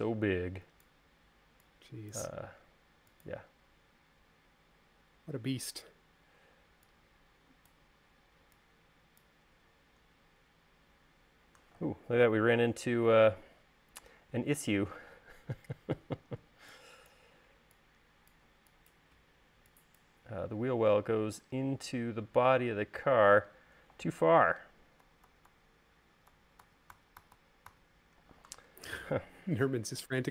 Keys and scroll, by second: 17.2 e, 25.6 super+z, 27.2 super+z, 30.1 space.